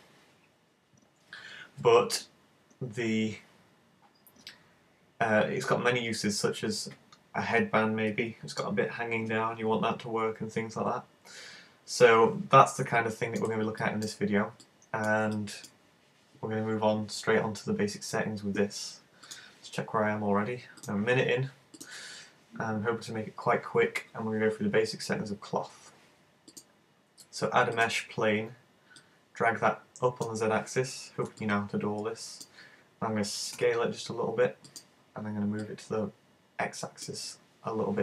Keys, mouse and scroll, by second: 13.0 middle click, 13.8 shift+middle click, 14.7 middle click, 15.3 shift+middle click, 21.8 click, 26.6 click, 29.0 click, 31.5 middle click, 33.6 s, 34.8 click, 35.7 click.